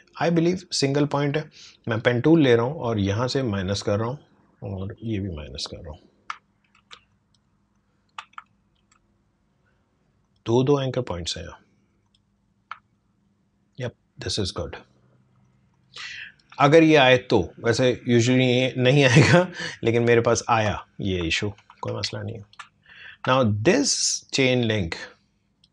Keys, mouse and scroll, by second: 0.2 space, 1.9 click, 6.4 alt+scroll down 1, 6.9 space, 7.1 click, 7.4 space, 7.7 click, 7.8 space, 8.5 alt+scroll up 1, 10.2 click, 12.8 alt+scroll down 1, 15.4 click, 16.0 space, 16.1-21.7 drag, 21.7 ctrl+1, 22.4 click, 22.6 space, 22.9 click, 23.1 space, 23.8-25.7 drag.